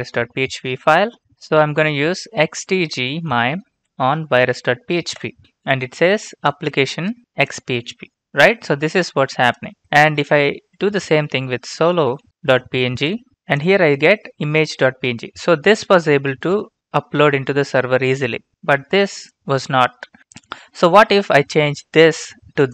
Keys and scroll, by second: 2.0-2.9 typing, 3.7 Tab, 5.1 Return, 10.3-11.9 typing, 12.1 Tab, 13.0 Return.